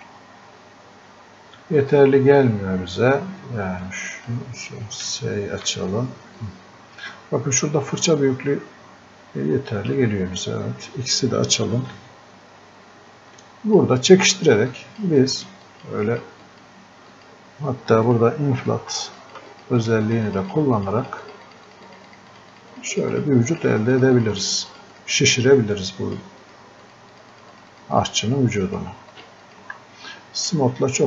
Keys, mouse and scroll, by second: 3.8 click, 5.7 s, 6.4 click, 12.0 x, 13.4 click.